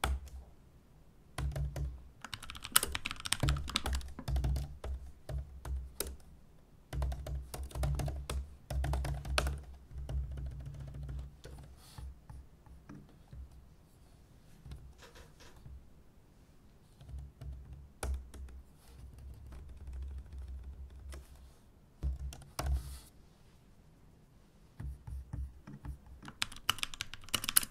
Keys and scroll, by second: 26.4-27.7 typing.